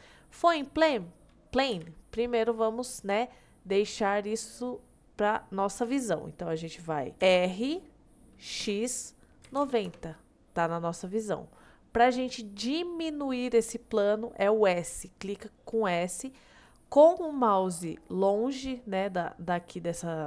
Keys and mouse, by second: 0.0 middle click, 0.7 middle click, 1.8 KP_1, 7.3 r, 8.7 x, 9.5 KP_9, 9.6 KP_0, 9.9 Return.